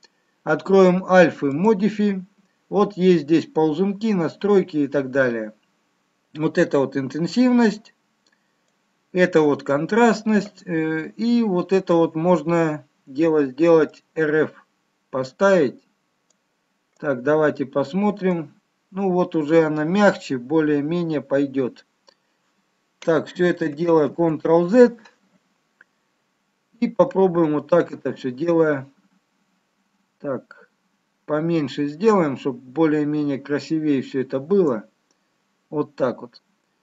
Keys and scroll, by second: 23.5 ctrl+z.